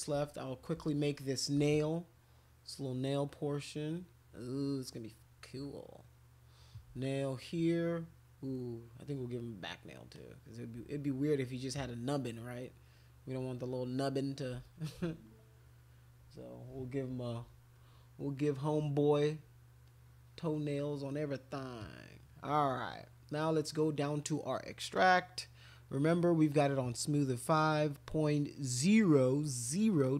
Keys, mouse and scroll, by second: 0.3 alt+click, 2.2-4.8 ctrl+drag, 5.6 ctrl+click, 7.1-8.1 drag, 9.0 click, 10.1 click, 11.7 ctrl+click, 12.0-14.3 ctrl+drag, 15.1-16.1 drag, 19.9 click, 21.8 click, 24.9 click.